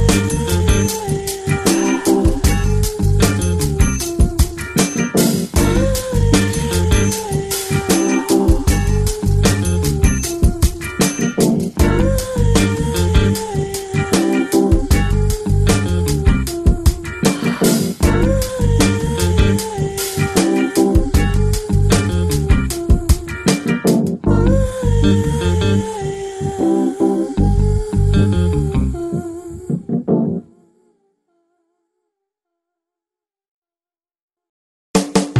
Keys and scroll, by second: 0.3 x, 4.3 x, 13.3 ctrl+space.